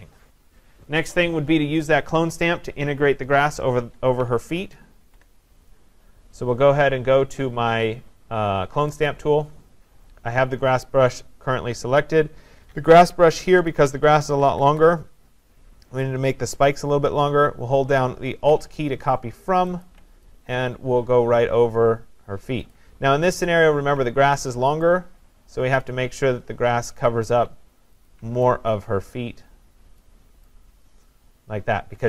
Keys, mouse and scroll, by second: 4.2 click, 4.6 ctrl+=, 5.0 ctrl+=, 9.1 click, 11.1 click, 13.5-14.7 typing, 19.9 alt+click, 22.7 click, 27.0 click, 28.1 alt+click, 30.0 click, 30.9 click.